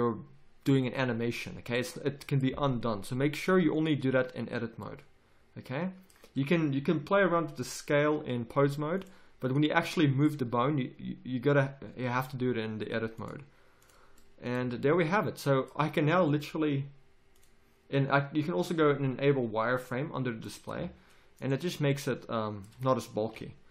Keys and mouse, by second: 4.8 middle click, 9.0 click, 9.9-12.3 middle drag, 14.6 a, 20.7 a, 23.3 g.